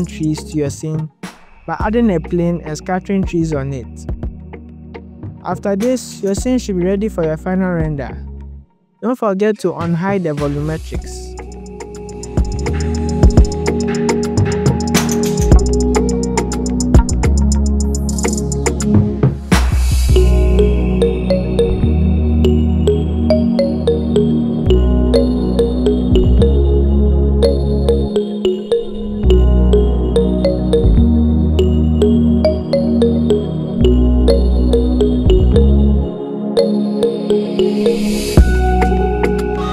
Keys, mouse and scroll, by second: 0.3-0.8 ctrl+z, 0.9 scroll down 2, 1.0 shift+click, 1.2 ctrl+z, 1.3 ctrl+z, 1.3-1.7 scroll up 3, 1.4-4.4 typing, 1.7 scroll down 1, 1.8 click, 2.5 shift+click, 2.6 scroll up 4, 3.7 click, 3.8 scroll up 2, 4.1 shift+click, 4.2 click, 4.4 scroll down 3, 4.5 click, 4.7 shift+click, 4.8 click, 4.9 click, 5.3 click, 5.4 click, 5.5 click, 5.5 scroll up 1, 5.7 click, 5.9 click, 6.1-7.3 scroll down 9, 6.3 click, 6.4 click, 6.4 click, 7.3 click, 7.6-8.0 scroll up 11, 8.0 click, 12.9 click, 13.0 KP_7, 13.1 scroll down 1, 13.1 shift+g, 14.0 click, 16.9 click, 17.1 click, 21.1 click, 25.6 click, 28.6 click, 31.1 click, 31.4 click, 31.5 click, 31.8 click, 31.9 a, 31.9 KP_Decimal, 32.0 click, 32.1-32.8 scroll up 10, 32.8 middle click, 32.8 middle click, 33.4 click, 35.9 scroll up 2, 35.9 middle click, 36.5 scroll down 4, 36.6 middle click, 37.9 click, 38.1 click, 38.2 g, 38.7 click, 38.9 scroll up 2, 39.0 g, 39.3 g, 39.6 click.